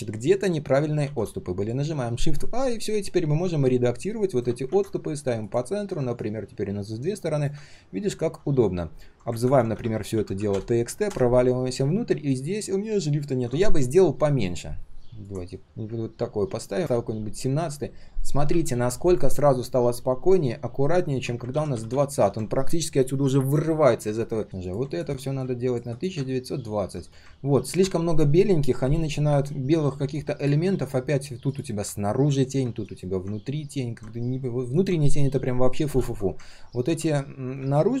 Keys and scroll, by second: 4.6 ctrl+z, 9.4 ctrl+r, 21.5 ctrl+z, 21.7 ctrl+z, 21.9 ctrl+z.